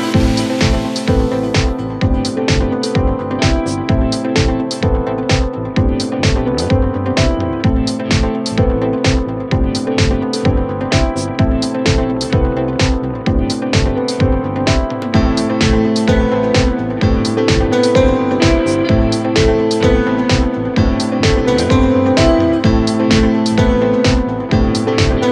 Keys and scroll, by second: 0.1 F3, 3.6 space, 11.7 F3.